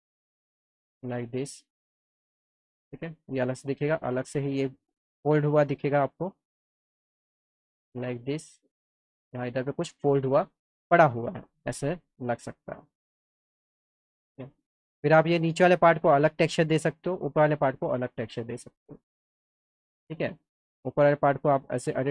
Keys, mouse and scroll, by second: 1.4 click, 3.1 click, 3.8 click, 4.2 alt+middle click, 5.0 middle click, 5.9 click, 7.2 click, 7.8-9.8 alt+middle drag, 11.8 click, 12.4-13.9 alt+middle drag, 14.6 click, 17.1 click, 18.7 alt+click, 18.7 alt+middle click, 19.5 click, 21.2 click.